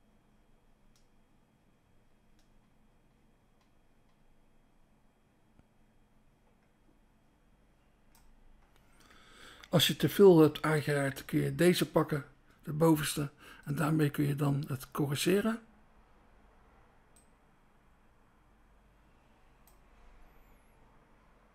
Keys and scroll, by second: 11.8 BackSpace.